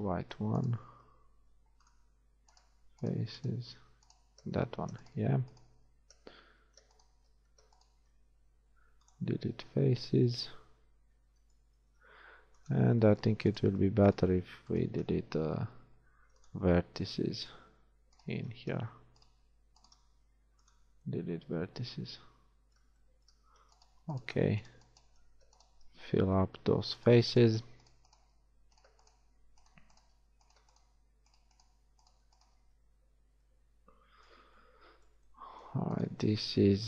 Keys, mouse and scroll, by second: 0.7-2.4 right drag, 1.4 x, 2.6-3.8 drag, 3.8-6.4 right drag, 3.8 z, 4.8 z, 6.6 z, 7.4 z, 8.4 x, 9.6 z, 10.1 z, 11.9 ctrl+Tab, 15.7 x, 16.6 click, 18.5 click, 20.1 shift+x, 26.6 f, 28.5 f, 30.3 f, 32.7 f, 33.2 a, 33.5 middle click.